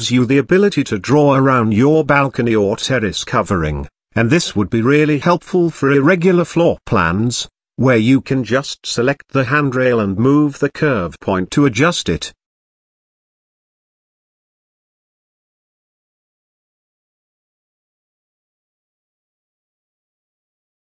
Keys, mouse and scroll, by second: 2.2-4.4 drag, 6.8-9.1 scroll down 4, 10.0-11.4 drag, 11.4 g, 20.3 Tab.